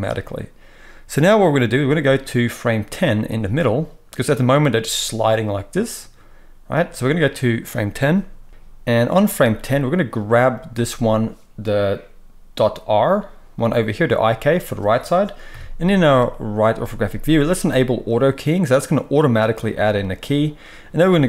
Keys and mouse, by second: 10.6-18.1 middle drag, 15.5 KP_3, 18.1 click, 18.5-21.2 middle drag, 21.1 g.